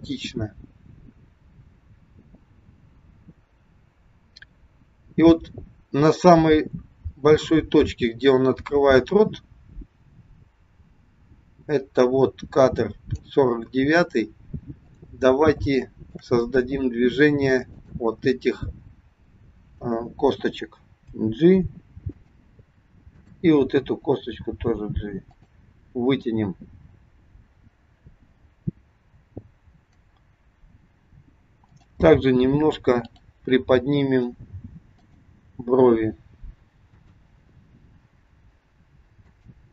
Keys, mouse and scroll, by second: 14.8 click, 15.6 shift+middle click, 16.5 scroll up 2, 17.6 click, 21.0 g, 23.2 click, 24.2 g, 31.5 click, 32.9 click, 34.1 g, 36.9 click, 38.0 g.